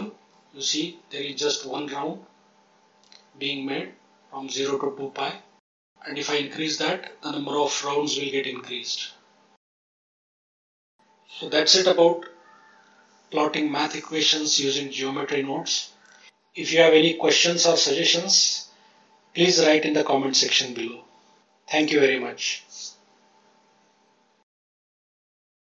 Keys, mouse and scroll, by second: 0.9 scroll up 1, 2.0-4.1 scroll up 2, 5.7 click, 6.3 click, 7.2-7.8 scroll down 2, 11.2 click, 12.3-13.8 ctrl+drag, 14.7-17.7 drag, 18.9-23.5 drag.